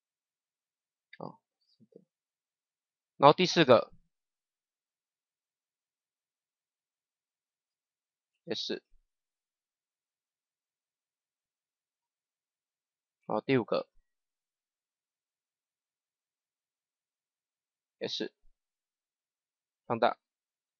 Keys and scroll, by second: 2.6 Delete, 8.3 s, 12.4 Delete, 17.9 s.